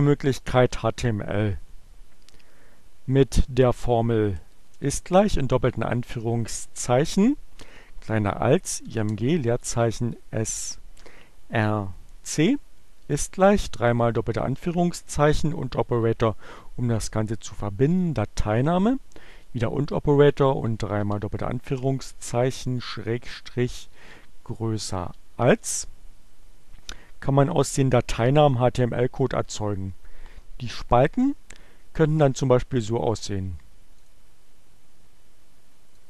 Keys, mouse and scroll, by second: 3.4 shift+0, 6.0 shift+2, 6.4 <, 8.3-11.1 typing, 13.6 shift+2, 16.0 shift+6, 17.8 click, 18.8 shift+6, 19.7 shift+2, 21.5 shift+7, 23.8 shift+<, 24.2 shift+2, 25.3 shift+Return, 34.1 click, 35.5-36.0 drag.